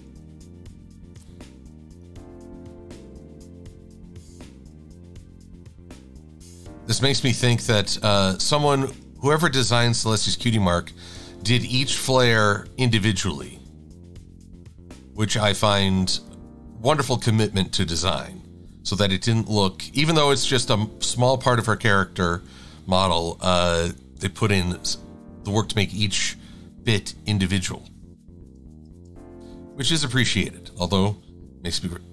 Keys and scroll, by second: 28.5 shift+x, 29.0 shift+super+a, 29.8 v, 31.4 e.